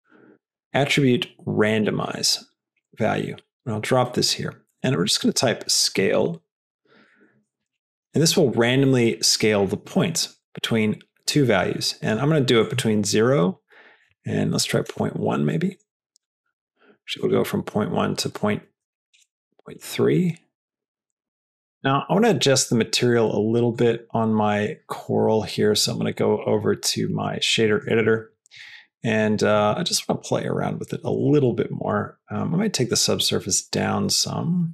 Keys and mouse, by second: 4.1 click, 4.8-8.4 drag, 10.5-12.0 drag, 12.5-15.5 shift+drag, 16.1-17.8 drag, 18.3-19.7 drag, 20.4 click, 23.6 click, 26.0-27.2 drag, 27.5 middle click, 28.4 click, 28.9 click, 29.4 click, 29.8 drag, 31.2 click, 31.3 middle click, 31.8 click, 33.1-34.7 drag.